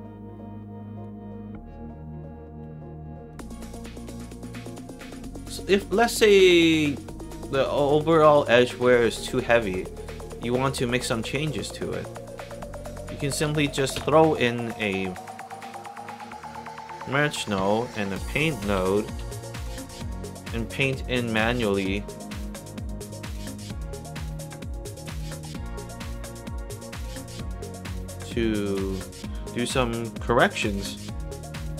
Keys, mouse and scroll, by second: 0.3 alt+click, 3.2 click, 4.1-4.4 drag, 5.2 middle drag, 6.4 alt+click, 6.8 alt+middle click, 7.3 alt+click, 7.8 alt+right click, 8.1 alt+middle click, 8.4 alt+right click, 8.7 alt+click, 10.3 middle drag, 11.1 click, 12.6 click, 13.9 m, 15.0 middle drag, 15.6 click, 16.0 scroll down 2, 16.8 click, 17.3 click, 17.5 Tab, 18.4-19.6 typing, 19.7 Down, 20.0 shift+Return, 24.7 click, 25.8-26.2 drag, 27.0-28.0 drag, 28.6 click.